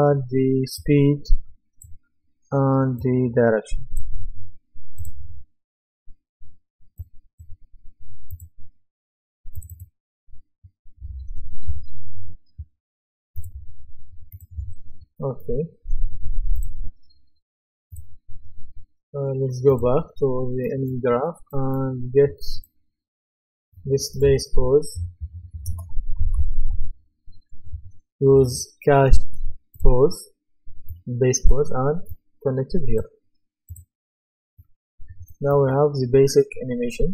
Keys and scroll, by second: 24.7-27.4 typing.